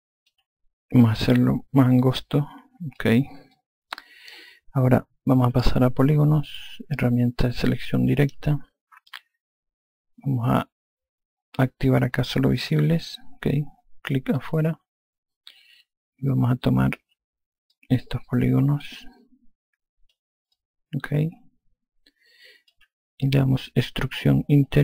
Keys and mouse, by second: 1.3 click, 3.8 alt+click, 6.6 click, 8.5 4, 13.0 click, 14.7 click, 16.6 alt+click, 18.0 click, 20.8 alt+click.